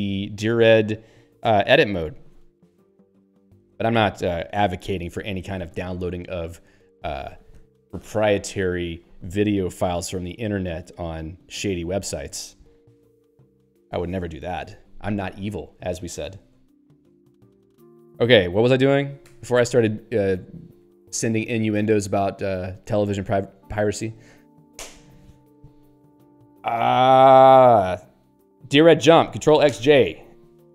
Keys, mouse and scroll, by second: 20.8 e.